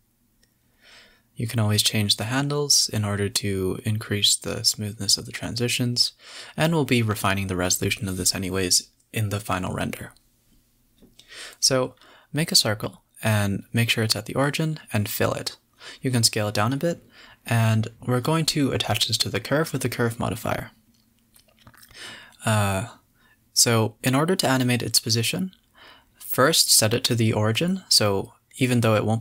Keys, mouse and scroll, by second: 1.0 click, 1.2 s, 2.2 g, 2.9 r, 3.7 s, 4.7 click, 4.8 g, 5.5 e, 7.1 click, 7.4-12.3 typing, 9.6 Tab, 10.2 scroll up 1, 10.8 Tab, 11.0 click, 11.9 Tab, 12.0 scroll down 2, 14.9 Tab, 15.2 scroll up 3, 15.4 f, 15.8 Tab, 16.2 s, 17.2-17.6 scroll down 5, 17.6 g, 19.3 click, 19.9-21.4 drag, 22.3-22.6 scroll down 6, 22.8 scroll up 2, 23.0 scroll down 3, 23.2 g, 25.8 scroll up 1, 26.0 alt+g, 26.5 g.